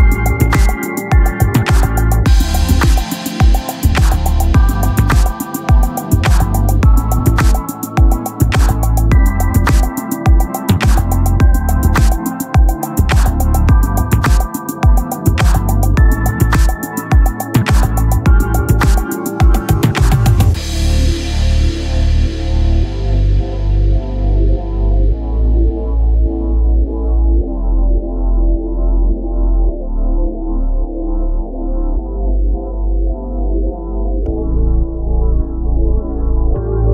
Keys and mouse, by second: 0.9 click, 4.5 ctrl+=, 7.2 ctrl+=, 7.7-8.1 typing, 9.4 click, 13.0 click, 15.7 [, 17.1-17.4 typing, 19.9 click, 24.8 right click, 25.8 click, 28.3 click, 30.3 click.